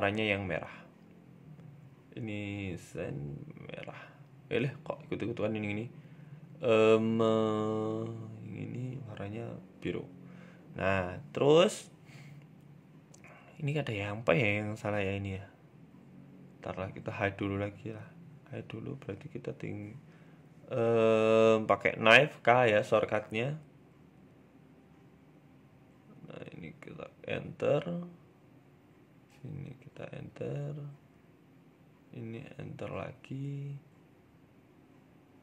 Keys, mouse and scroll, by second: 1.5 click, 2.1 click, 3.7 click, 3.7 scroll down 2, 3.9 Tab, 4.0 middle click, 4.9-5.9 scroll up 2, 5.2 shift+middle click, 5.9 shift+middle click, 6.4 middle click, 6.6 Tab, 7.0 middle click, 7.5 right click, 7.8 alt+shift+right click, 8.8 click, 9.2 click, 9.4 scroll down 3, 9.5 Tab, 9.7 middle click, 10.5-10.9 scroll up 2, 10.8 middle click, 11.7 Tab, 11.9 middle click, 12.8 scroll up 2, 13.0 shift+middle click, 14.2 middle click, 15.5 l, 16.3 l, 17.3 h, 17.5 middle click, 17.9 shift+middle click, 18.4 middle click, 18.9 middle click, 19.0 shift+middle click, 20.7 click, 21.3 k, 23.1 middle click, 24.3 k, 30.6 k.